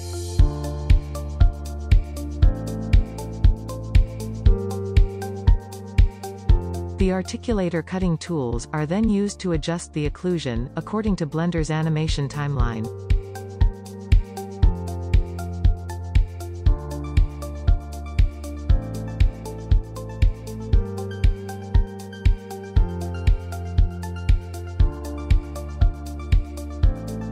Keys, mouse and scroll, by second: 0.4-1.9 drag, 2.3-3.0 scroll down 2, 3.5 middle click, 3.7 click, 3.8 scroll down 1, 4.4 click, 5.2 click, 6.2 middle click, 8.0-9.5 drag, 9.5 right click, 10.0-13.2 middle drag, 13.2 scroll down 1, 13.3-14.0 middle drag, 14.0 click, 14.2 h, 14.5-15.4 shift+middle drag, 15.4 middle click, 16.1 click, 16.6 click, 16.9-17.9 drag, 17.9 shift+middle click, 18.2 click, 19.0 shift+middle click, 19.3-19.8 drag, 20.4 shift+middle click, 20.4 click, 21.2 shift+middle click, 21.4-22.4 scroll up 1, 22.4 Tab, 23.2-24.2 scroll up 3, 24.2-25.8 middle drag, 25.8-26.6 scroll down 4, 26.0 middle click.